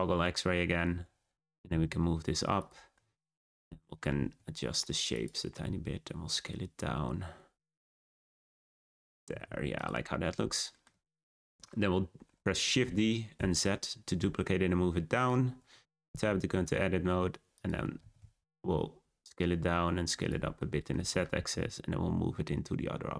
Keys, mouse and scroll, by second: 0.2 middle click, 0.9 Tab, 1.2-1.6 scroll down 2, 1.6 g, 2.9-3.4 middle drag, 3.4 Tab, 3.6 a, 3.8 s, 5.6 s, 8.0-8.6 scroll down 5, 8.6 shift+middle click, 9.0-9.3 scroll up 3, 9.3 s, 10.0 scroll up 2, 10.2 Tab, 10.7-12.8 shift+middle drag, 12.8 shift+d, 15.5 Tab, 15.9 a, 16.1 s, 17.9 s, 20.5 middle click, 20.9 Tab, 21.2 g.